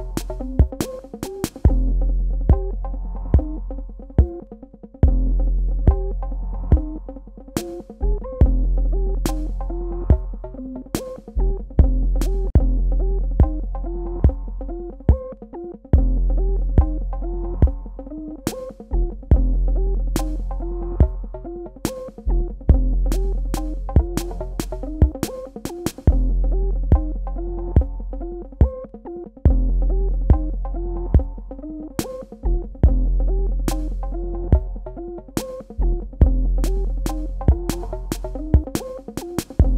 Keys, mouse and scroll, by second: 12.5 Tab, 13.2 ctrl+alt+click, 17.8 right click, 19.3 super+KP_Add, 21.4 super+KP_Subtract, 22.4 ctrl+click, 24.6 alt+click, 27.8 ctrl+space, 28.0 ctrl+alt+click, 29.9 alt+click, 34.9 alt+Num_Lock, 36.7 click.